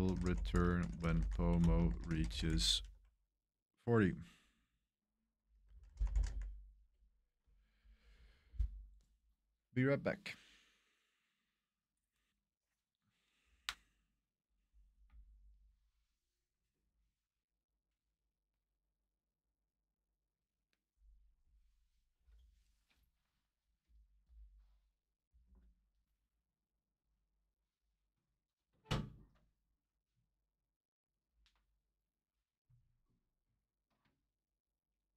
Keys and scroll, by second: 0.0-3.4 typing, 5.3-6.7 typing, 6.8 Return.